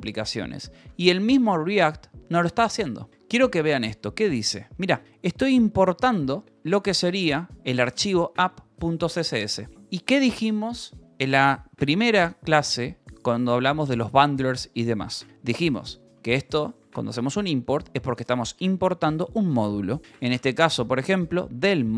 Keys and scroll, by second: 0.3 k, 1.0 k, 2.7-4.8 typing, 5.9-8.3 typing, 6.4 Escape, 9.0 Escape, 16.4 j, 16.7 k, 17.9 Escape, 20.5-21.9 typing, 21.2 Escape.